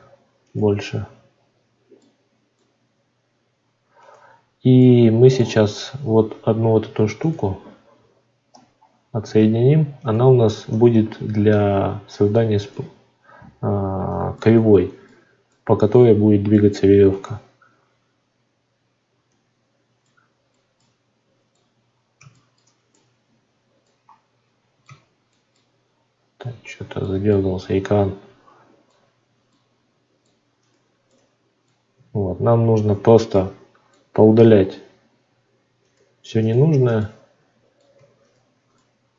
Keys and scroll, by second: 5.6 Tab, 10.7 Tab, 31.9 Tab.